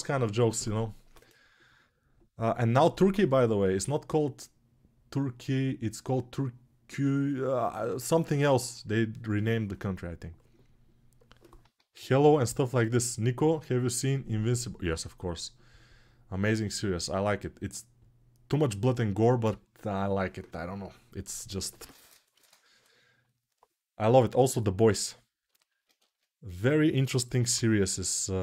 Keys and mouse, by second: 26.0 ctrl+Tab, 26.7 g, 27.1-28.4 ].